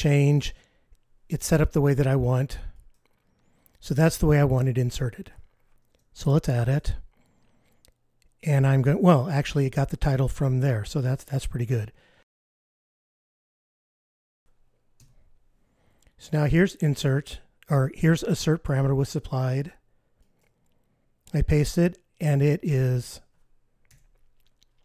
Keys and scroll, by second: 6.7 super+F15, 14.9 F15.